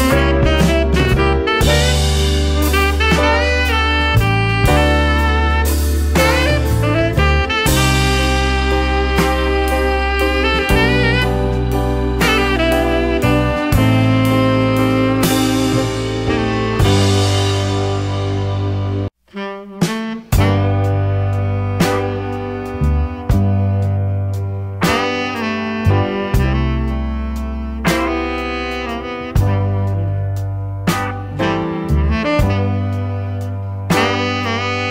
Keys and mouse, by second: 4.5 click, 4.9-7.4 drag, 8.1-8.6 drag, 9.2-11.9 drag, 12.3-13.4 drag, 13.8 middle click, 15.7-18.4 drag, 23.8 shift+click, 24.9-26.4 drag, 26.7 shift+click.